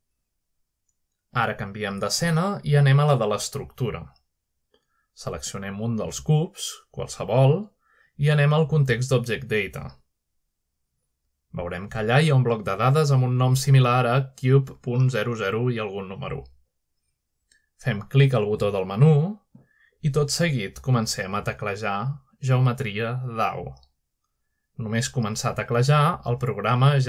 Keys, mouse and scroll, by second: 1.3-2.5 scroll down 1, 2.5-3.4 scroll down 1, 3.4-5.3 scroll down 1, 5.7 middle click, 6.0 Tab, 7.1-9.1 drag, 9.1 shift+middle click, 9.6-10.1 middle drag, 10.1-11.7 drag, 13.6 click, 19.2 click, 22.2 typing.